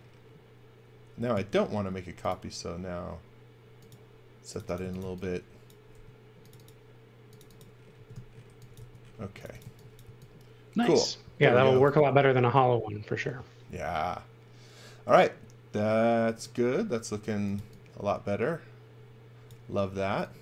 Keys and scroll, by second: 4.5-5.9 typing, 7.9-10.0 typing, 11.3-12.3 typing, 17.1-18.0 typing, 20.1 x.